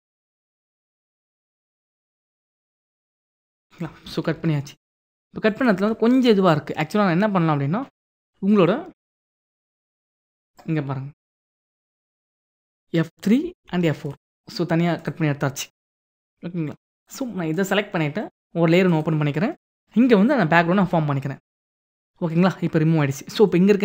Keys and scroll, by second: 3.6 ctrl+=, 8.9 ctrl+-, 9.4 ctrl+-, 12.9 F3, 20.4 alt+BackSpace, 21.4 alt+BackSpace.